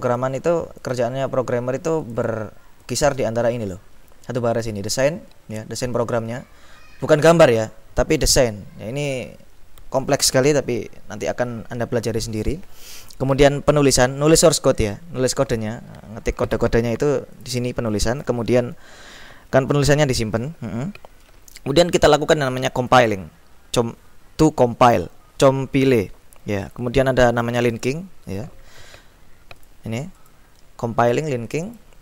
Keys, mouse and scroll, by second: 0.2 click, 2.2 click, 2.9 click, 5.1 click, 13.8 click, 17.5-18.8 drag, 23.0 click, 26.7 click, 27.7 click, 29.6-30.9 drag, 31.1-32.0 drag.